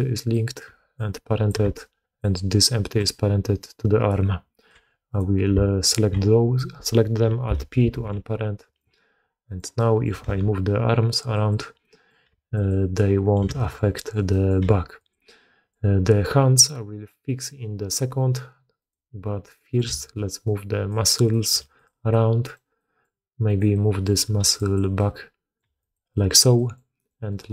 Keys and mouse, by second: 0.0-2.1 typing, 0.9 click, 1.6 click, 3.9 d, 4.0-4.6 drag, 4.6 d, 5.0 click, 5.8 shift+click, 7.6 alt+p, 7.9 alt+a, 9.4-10.0 drag, 10.3 r, 11.7-12.0 drag, 12.2 g, 13.0 drag, 13.1 middle drag, 13.1 right drag, 13.5 shift+drag, 13.9 drag, 13.9 middle drag, 13.9 right drag, 14.2 drag, 14.2 middle drag, 14.2 right drag, 14.5 g, 15.4-15.7 drag, 15.4-15.7 middle drag, 15.4-15.7 right drag, 17.0-17.4 drag, 17.0-17.4 middle drag, 17.0-17.4 right drag, 18.8 click, 19.5 click, 19.8 g, 21.2 click, 21.5 g, 22.1-22.5 drag, 22.7 drag, 23.4 click, 23.6-24.0 drag, 25.0 click, 25.6 g, 26.2 drag, 26.5 drag, 26.9 click, 27.2 click.